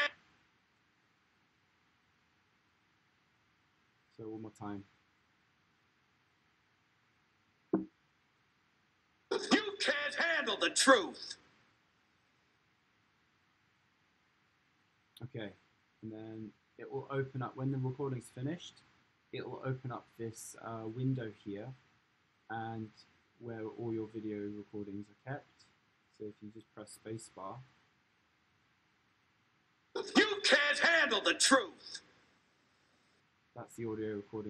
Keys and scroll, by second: 8.2 super+r, 9.2 space, 27.5 space, 33.5 space.